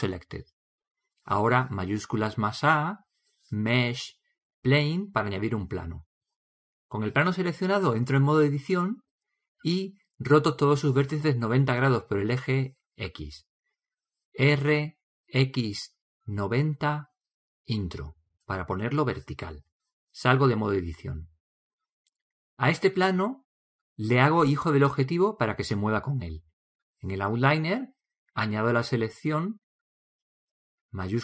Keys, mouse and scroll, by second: 2.6 shift+a, 8.9 Tab, 14.9 r, 21.3 Tab.